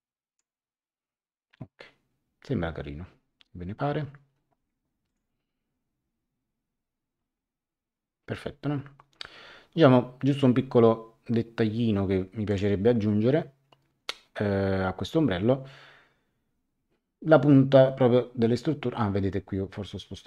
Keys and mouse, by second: 5.0 click, 12.5 click.